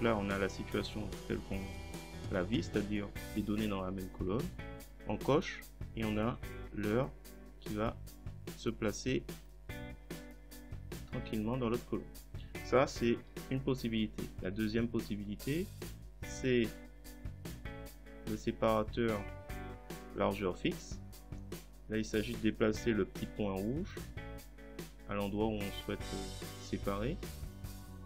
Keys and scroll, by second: 13.2 ctrl+z.